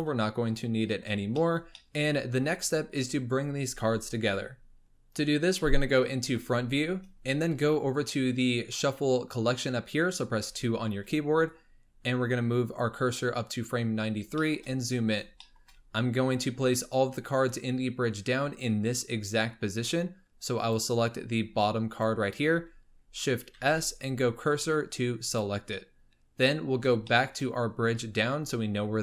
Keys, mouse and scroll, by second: 1.3-2.5 shift+middle drag, 2.5 scroll up 2, 6.2 KP_1, 10.3 2, 11.4-13.9 drag, 13.9-14.3 scroll up 3, 14.3-14.7 shift+middle drag, 14.8-15.4 scroll up 6, 15.4 shift+middle drag, 15.7 shift+scroll up 2, 16.5-19.9 scroll down 6, 20.5 click, 21.1-21.8 scroll up 6, 21.8 click, 23.5 shift+s, 26.4-27.0 scroll down 10, 27.0-29.0 shift+middle drag.